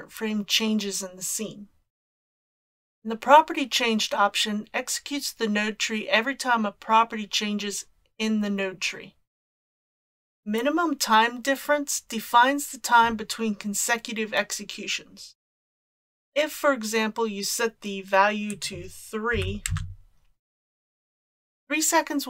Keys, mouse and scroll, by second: 18.5-19.6 drag.